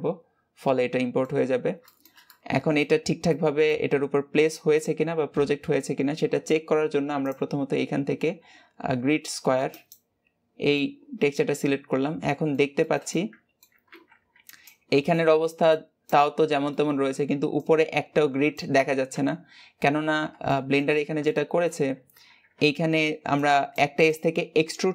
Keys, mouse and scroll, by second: 1.2-1.6 scroll up 2, 1.6-9.8 shift+middle drag, 9.8 click, 10.6-18.8 middle drag, 18.9 middle click, 19.4-20.3 scroll up 2, 20.3-24.9 shift+middle drag.